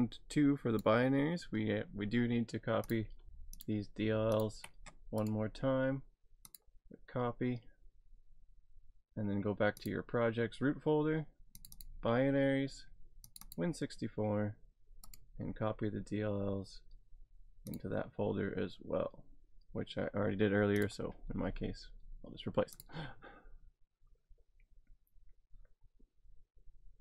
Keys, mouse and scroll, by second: 2.9 click, 4.4 ctrl+click, 5.2 right click, 6.5 click, 9.8 click, 11.5 click, 11.8 double click, 13.2 double click, 13.3 click, 13.5 double click, 15.0 double click, 15.1 right click, 17.7 click, 20.8 click, 22.8 click.